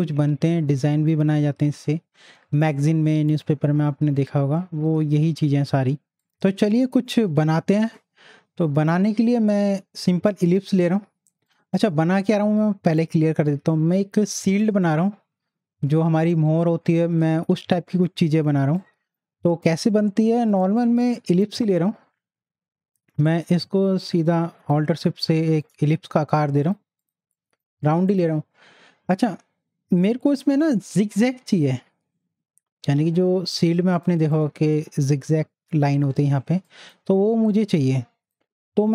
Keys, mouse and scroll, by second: 6.2 right click, 6.2 click, 10.5 click, 10.6 right click, 11.4 click, 18.5 click, 18.8 click, 19.0 space, 20.5 right click, 21.3 click, 23.4-26.6 alt+shift+drag, 30.2 click, 30.7 z, 31.0-33.7 drag, 36.6 click, 37.4 space, 37.8 click, 37.9 space, 38.4 click.